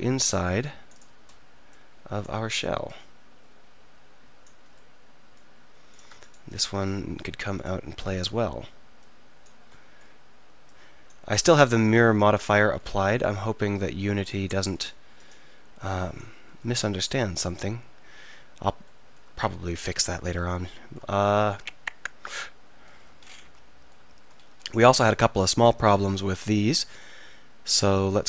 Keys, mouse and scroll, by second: 4.8 click, 5.3-7.1 drag, 7.1-9.7 right drag, 9.8 click, 9.8 right click, 9.9 middle click, 13.2-18.2 middle drag, 19.1 middle click, 20.6 middle click, 21.3 middle click, 26.8-28.2 middle drag.